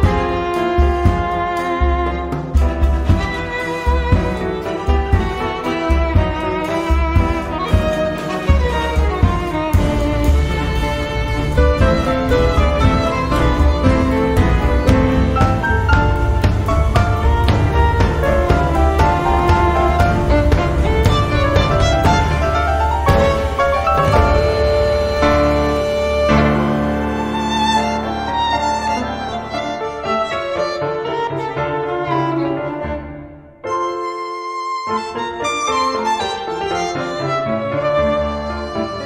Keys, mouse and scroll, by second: 0.2 click, 2.3 click, 3.8 click, 4.7 click, 6.2 click, 7.8 click, 9.8 1, 10.4 2, 11.7 0, 12.8 click, 13.4 space, 15.5-18.2 drag, 18.8 click, 19.3 space, 19.7 click, 20.5 1, 21.0 2, 22.4 click, 24.0 click, 25.2 2, 25.7 4, 26.8-28.0 drag, 28.2-32.0 drag, 32.0 click, 32.8 click, 33.5 click, 34.2 click, 35.2 click, 36.6 click, 38.3 click.